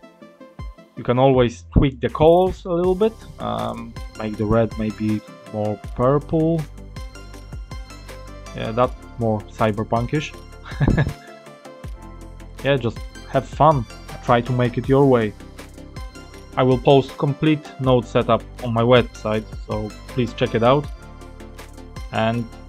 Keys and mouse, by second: 0.7-1.7 middle drag, 2.7 click, 9.0-9.9 drag, 9.9-11.4 middle drag, 11.6 click, 12.4 click, 13.2-14.6 middle drag, 16.4 middle click, 18.5-20.5 middle drag.